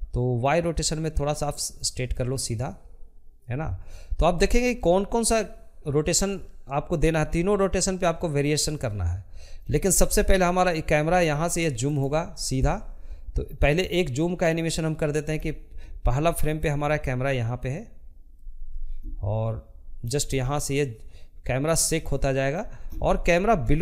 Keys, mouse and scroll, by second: 3.2-11.1 drag, 22.5-23.8 shift+middle drag.